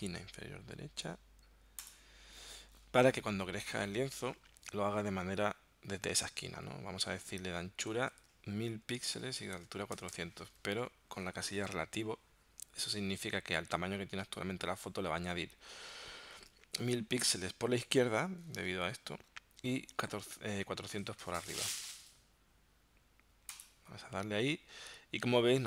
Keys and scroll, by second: 7.7-9.9 typing, 9.1 Tab, 10.5 Tab.